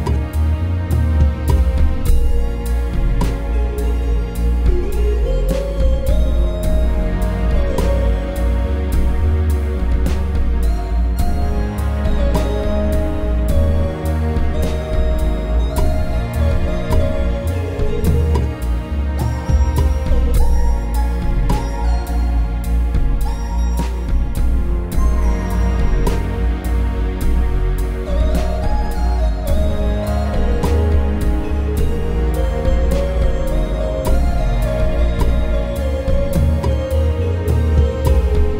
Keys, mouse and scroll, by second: 7.0 m.